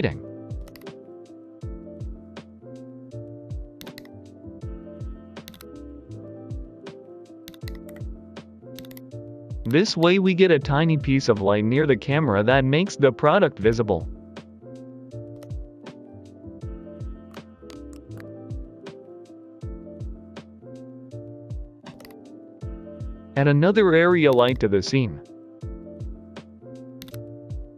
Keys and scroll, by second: 0.0 Return, 0.6 a, 3.7 typing, 5.2-5.9 typing, 7.3-9.9 typing, 17.8 ctrl+p, 18.1 Return, 21.9 a, 24.2 typing, 26.9-27.7 typing.